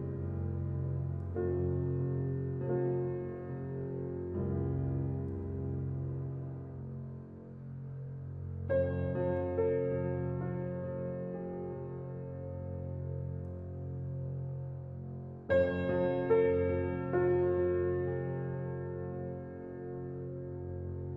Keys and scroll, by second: 9.8 ctrl+c, 13.3 ctrl+v, 15.6 ctrl+v, 16.1 ctrl+t.